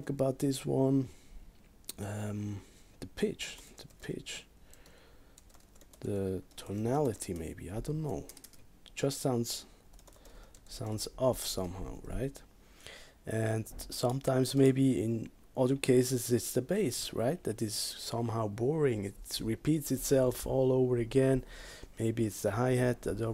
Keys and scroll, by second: 3.4-8.0 typing, 8.5 Return, 9.9-11.4 typing, 11.6 Return.